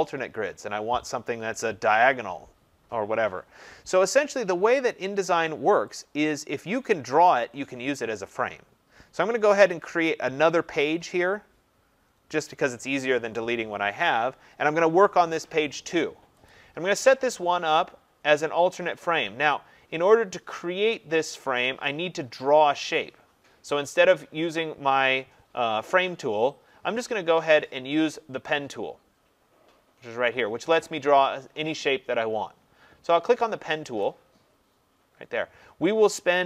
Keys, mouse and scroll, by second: 6.0 click, 9.6-11.0 drag, 11.3 click, 16.4-21.5 drag, 34.0-36.4 drag.